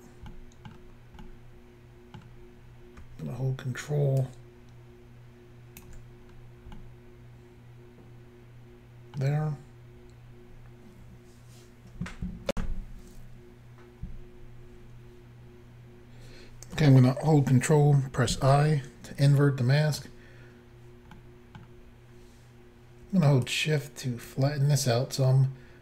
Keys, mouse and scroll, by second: 0.4 middle click, 1.3 middle click, 2.5-3.0 scroll up 1, 4.2 ctrl+click, 6.3-6.8 scroll down 2, 6.8 middle click, 9.4-10.3 scroll up 1, 12.5 Insert, 18.3 ctrl+i, 19.3 middle click, 21.2 middle click, 23.5 shift+click.